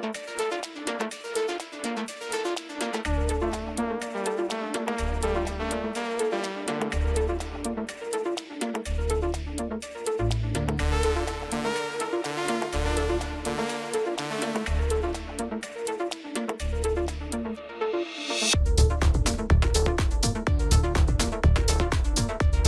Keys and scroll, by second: 1.9 ctrl+alt+d, 3.4 ctrl+alt+space, 18.6 alt+s, 18.9 ctrl+z.